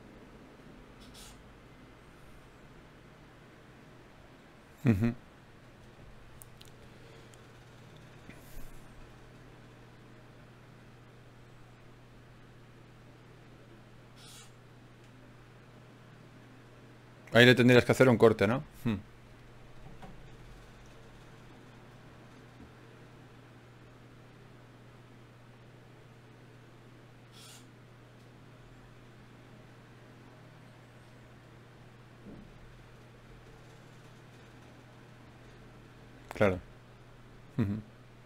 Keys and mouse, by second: 0.0-1.5 typing, 0.5 middle click, 8.8-12.8 middle drag, 14.2 middle click, 15.2-20.1 drag, 21.3-23.6 right drag, 22.8 f, 25.2 ctrl+z, 26.4 ctrl+r, 28.0-29.0 drag, 29.0 g, 29.7-30.9 drag, 30.0 g, 30.9 right click, 31.3 click, 37.5 ctrl+Tab.